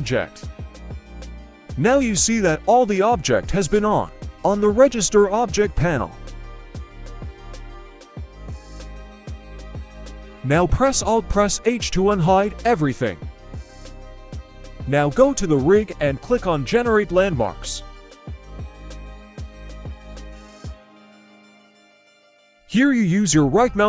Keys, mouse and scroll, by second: 0.2 click, 1.2-2.0 scroll up 2, 2.0-2.5 scroll down 1, 2.5 click, 2.9 click, 3.2 scroll up 1, 3.5 click, 4.2-5.0 scroll up 1, 5.0-5.6 scroll up 2, 5.6 click, 6.3 right click, 7.3 middle click, 7.3-8.0 scroll down 2, 8.0 shift+middle click, 9.0 alt+h, 9.5-10.0 scroll up 1, 10.2 right click, 10.7-11.0 middle drag, 11.4 h, 11.7-12.2 scroll up 2, 12.1 right click, 12.9-13.6 scroll up 1, 13.6-14.5 scroll up 3, 14.5 click, 17.3-20.9 drag, 21.9-23.8 drag.